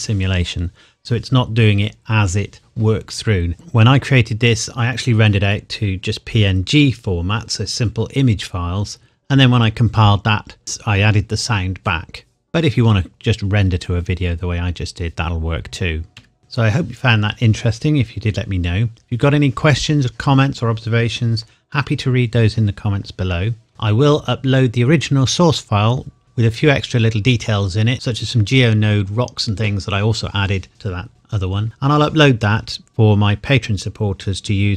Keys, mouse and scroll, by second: 16.2 Escape.